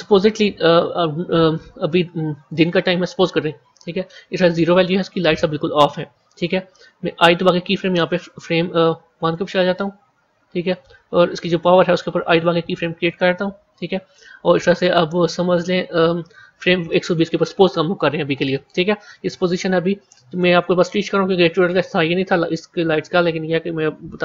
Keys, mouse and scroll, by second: 2.6-5.5 drag, 9.2-12.2 drag.